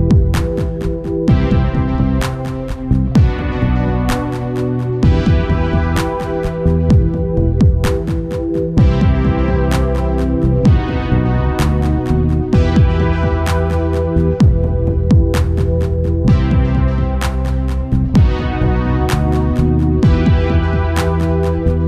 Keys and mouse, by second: 8.7-10.1 drag, 10.1 ctrl+s, 10.8 Tab, 14.3-15.8 right drag, 15.8 Tab, 16.6 a, 17.8 a, 19.4 u.